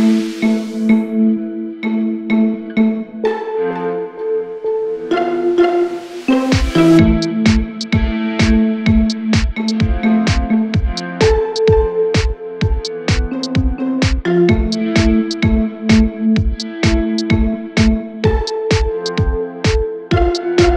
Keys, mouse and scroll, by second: 5.7 Right, 5.9 Right, 6.2 Right, 6.8 Right, 7.1 Right, 7.7 Right, 11.3 p.